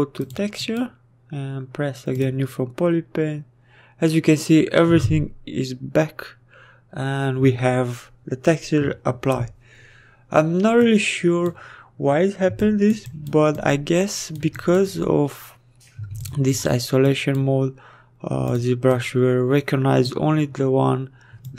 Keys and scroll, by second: 13.0 s.